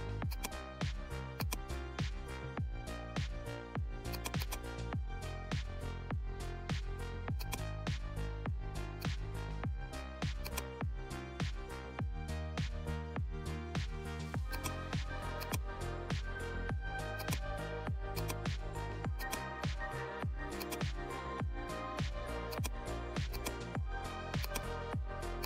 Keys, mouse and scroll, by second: 0.3 click, 4.1-10.3 drag, 10.3 click, 10.4-25.4 drag.